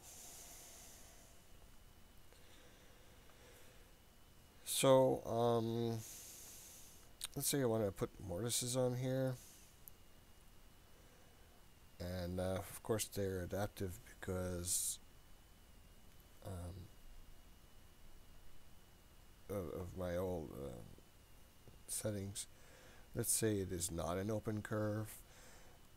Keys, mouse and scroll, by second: 0.5 click, 1.5-4.3 scroll up 3, 9.2 click, 22.5 click.